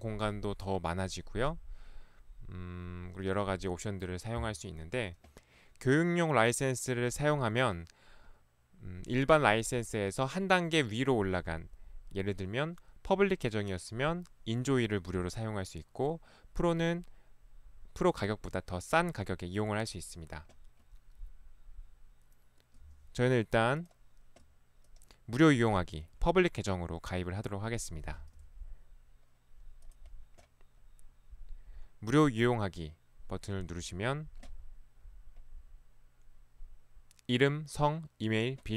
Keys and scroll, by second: 28.2 Escape.